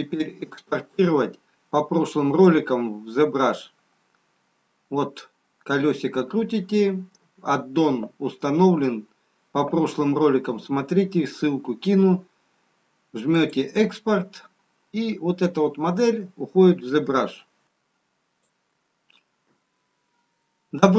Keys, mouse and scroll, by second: 4.8-8.7 scroll down 4, 15.3 click.